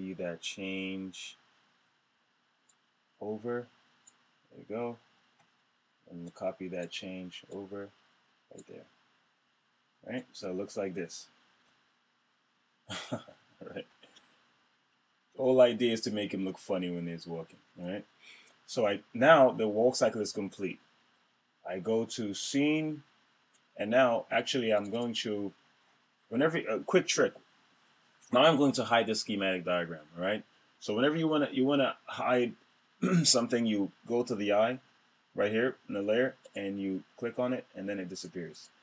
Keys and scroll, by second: 11.2 Return, 13.7 Return.